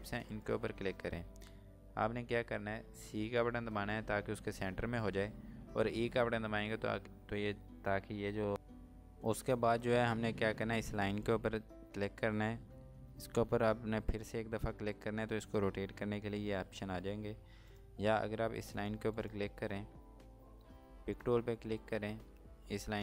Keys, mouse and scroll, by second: 0.4 shift+click, 4.0 c, 9.8 click, 14.1 click, 17.7 click, 20.3 space.